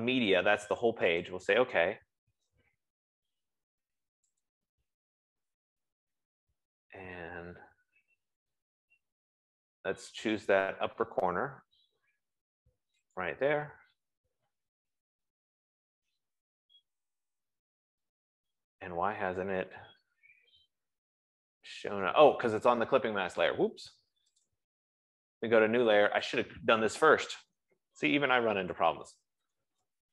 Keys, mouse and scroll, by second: 1.7 click, 5.0 click, 13.7 click, 24.8 click, 26.6 click, 27.6 typing, 28.9-30.1 typing.